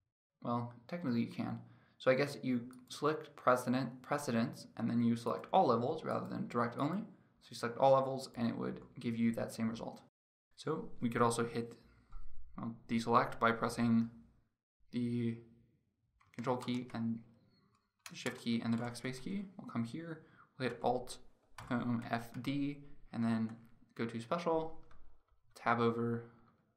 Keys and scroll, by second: 16.4 ctrl+BackSpace.